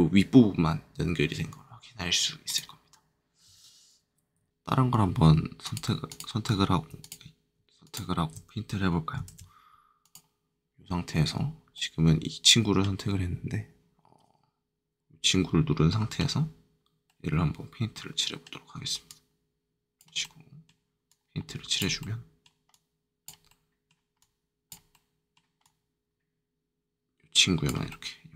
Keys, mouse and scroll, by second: 2.4-3.9 drag, 4.3 ctrl+z, 4.5 ctrl+Tab, 4.5 click, 5.6 shift+click, 6.0 click, 6.9 click, 7.8 shift+click, 9.2 ctrl+shift+Tab, 10.0 click, 11.3-11.7 scroll down 2, 11.7 middle click, 19.0-20.2 drag, 21.0 click, 22.6 click, 23.4 middle click, 24.1 click, 24.9 middle click, 25.6 click, 27.8 middle click.